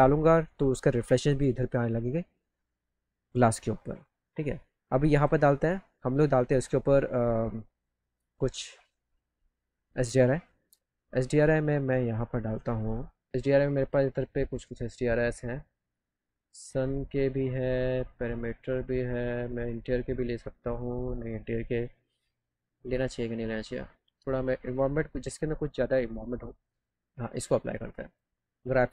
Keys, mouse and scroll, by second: 14.0 click, 14.5 click, 15.6 click, 15.7 click, 16.9 click, 17.4 click, 17.7 click, 18.7 click, 19.1 click, 19.5 click, 19.7 click, 20.8 middle click, 24.4 click, 26.5 middle click, 28.0 click.